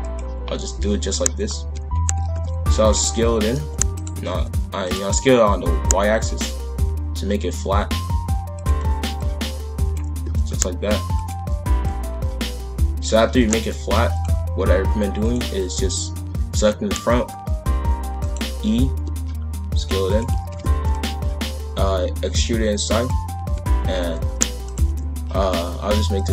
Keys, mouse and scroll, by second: 1.4 scroll down 1, 1.6 a, 2.2 shift+f, 3.3 s, 4.1 s, 9.1 click, 10.2 s, 11.8 click, 13.3 shift+f, 15.2 click, 18.0 e, 20.4 shift+f, 21.4 e, 23.4 a, 23.9 s, 24.8 s.